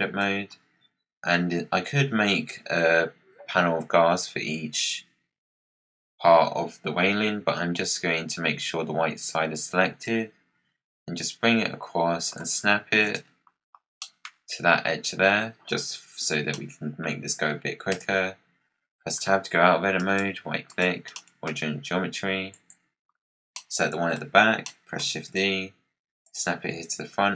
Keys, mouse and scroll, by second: 0.5 scroll down 3, 8.3 scroll up 4, 9.1 scroll down 5, 9.9 click, 12.9 KP_Decimal, 13.7 scroll down 3, 13.9 scroll up 1, 13.9-15.0 middle drag, 15.0-16.4 scroll down 5, 16.4-17.8 middle drag, 17.8 Tab, 19.9-21.1 right drag, 21.1 middle click, 21.4-22.4 scroll down 1, 22.4 click, 23.4-24.4 middle drag, 24.4 scroll up 2, 24.5-25.1 middle drag, 25.1 shift+d, 27.2 click.